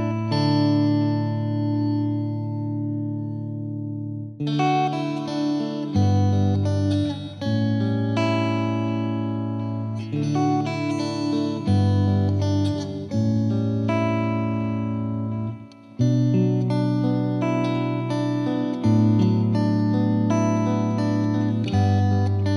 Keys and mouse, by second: 0.0 click, 1.2 click, 1.5-8.7 drag, 9.1-10.3 drag, 14.1-15.3 drag, 20.2-21.4 drag.